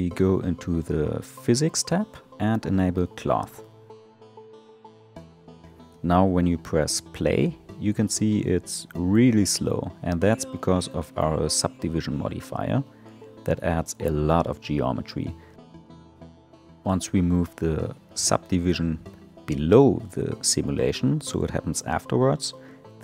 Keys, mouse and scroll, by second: 0.5 click, 2.0-5.2 drag, 5.4 space, 7.8 space, 10.6 click, 13.2-16.7 scroll down 4, 18.8-20.4 drag, 22.5 space.